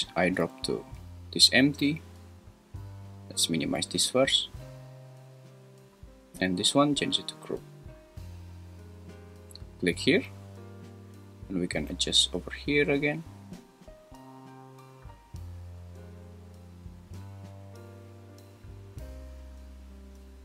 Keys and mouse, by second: 4.0 click, 6.5-7.9 drag, 12.1-20.4 shift+drag.